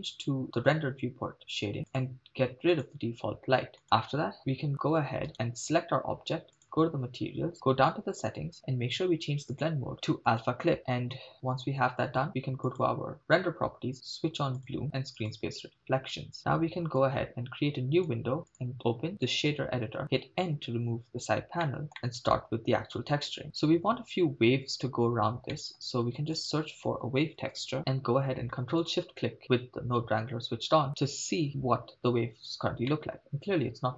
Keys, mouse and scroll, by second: 0.4 click, 1.9 drag, 2.9 click, 3.8 click, 5.3 right click, 6.6 click, 7.5-7.8 scroll down 2, 7.9 click, 9.6-10.6 drag, 12.7 click, 14.6-15.3 drag, 17.0-18.2 drag, 18.5-19.4 drag, 20.6 n, 21.2-21.6 scroll up 2, 21.7 middle click, 21.9 scroll up 5, 22.0 middle click, 25.6-25.9 middle drag, 26.2 shift+a, 29.0 ctrl+shift+click, 32.5-33.0 scroll up 3, 33.0 middle click.